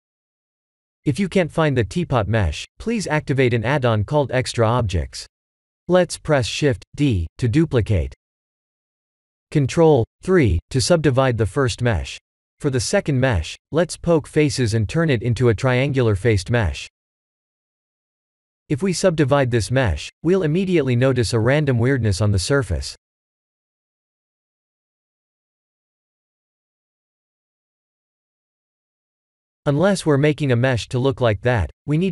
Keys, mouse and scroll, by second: 0.0 middle click, 0.2-0.7 scroll down 3, 0.7 shift+d, 3.0 shift+middle click, 3.5 middle click, 4.6 shift+middle click, 5.3 scroll up 2, 5.8 middle click, 5.8 middle click, 6.9 click, 7.8 ctrl+3, 9.7 click, 10.9 Tab, 11.2 a, 11.7 3, 13.1 click, 16.9-17.6 scroll up 1, 17.6 scroll up 2, 17.7 shift+middle click, 18.1 shift+middle click, 18.4 Tab, 20.1 ctrl+3, 20.2 ctrl+3, 20.2 click, 21.1-21.9 scroll up 9, 21.9 shift+middle click, 22.7-24.6 scroll up 5, 25.4 KP_Decimal, 26.5 middle click, 27.8 middle click, 28.1 right click, 29.5 middle click, 30.7 middle click, 31.5 click, 31.9 right click.